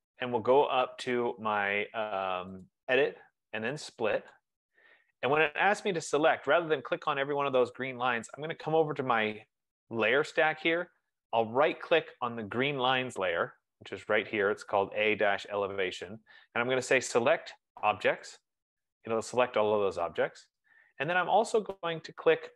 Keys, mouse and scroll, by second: 2.8 click, 4.8 click, 9.4 click, 12.0-16.9 right drag, 18.6 click.